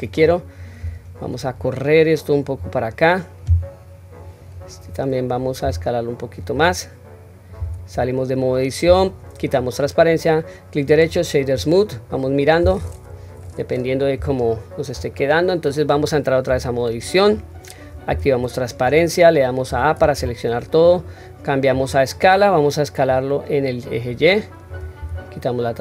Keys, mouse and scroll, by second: 0.0 click, 1.6 click, 4.2 click, 5.6 s, 7.6 Tab, 8.8 q, 9.8 right click, 11.5-12.5 middle drag, 13.4-14.0 middle drag, 14.3-14.9 shift+middle drag, 15.1-15.9 middle drag, 16.5 Tab, 18.0 q, 19.7 a, 21.7 click, 23.1 click, 23.4-24.7 drag, 25.0 q.